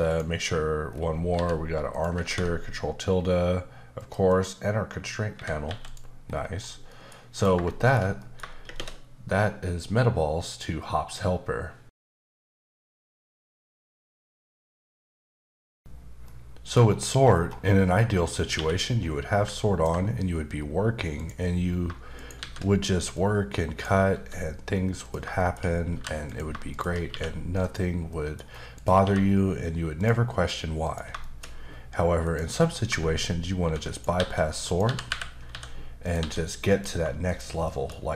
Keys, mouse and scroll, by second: 0.1 click, 0.9-1.3 scroll down 3, 1.3 g, 1.9 click, 3.9 click, 4.3 double click, 5.3 Escape, 5.7 x, 5.9 click, 6.2-6.9 scroll up 4, 6.9 middle click, 7.3 click, 7.7 shift+middle click, 8.6 shift+space, 16.8-17.7 scroll up 4, 17.7 scroll down 2, 17.9-18.5 scroll up 1, 18.5 q, 19.5 ctrl+click, 20.5-21.1 scroll up 3, 21.1 click, 21.7 scroll down 1, 22.1 shift+right click, 22.4 shift+a, 23.1 click, 24.1 s, 25.0 click, 25.4 shift+middle click, 25.9 g, 26.2 click, 26.7 shift+click, 27.1 q, 28.1 middle click, 28.4-28.7 scroll up 1, 28.7 click, 29.0 q, 29.9 click, 30.8 click, 31.2 shift+middle click, 31.5-31.8 scroll up 1, 32.2 click, 33.6-36.2 typing, 33.9 right click, 34.6 click, 36.0 click, 36.7 click, 37.2 shift+click, 37.6 shift+middle click, 37.9-38.1 scroll up 1.